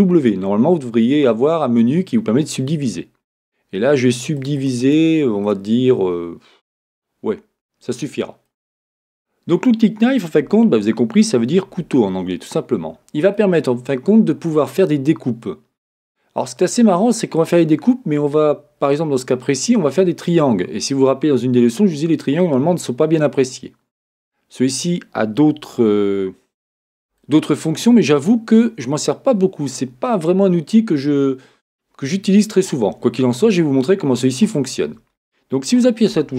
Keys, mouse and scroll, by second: 4.1-8.4 drag, 10.2-36.3 middle drag, 11.7 a, 36.1 k.